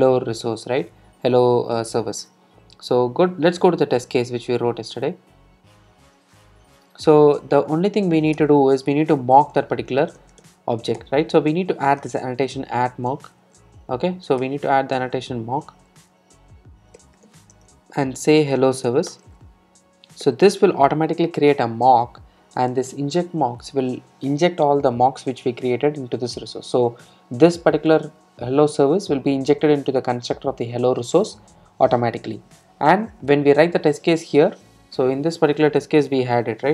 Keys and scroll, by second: 11.1 Return, 18.9 Return, 21.9 Return, 22.8 Return.